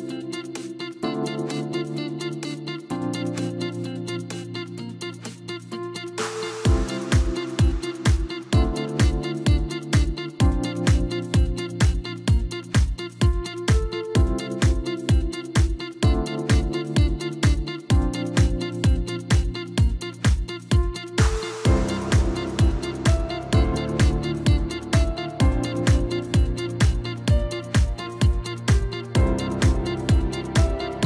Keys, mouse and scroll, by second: 1.6 e, 3.5-4.8 middle drag, 4.8 KP_1, 6.4 Tab, 7.5 s, 9.5-12.3 right drag, 12.3 s, 16.2 g, 18.3 scroll up 1, 18.6 scroll down 3, 18.8-20.3 middle drag, 20.3-20.6 scroll down 3, 20.6-22.0 middle drag, 22.0 click, 22.5-22.9 scroll up 2, 22.9 scroll down 3, 23.1-23.7 middle drag, 23.7-24.3 scroll up 2, 24.3 Tab, 24.8 middle click, 25.5 click, 26.4 KP_1, 27.6 e, 29.4 scroll up 1, 29.7 scroll down 2, 29.9 middle click, 30.3-31.0 scroll up 1.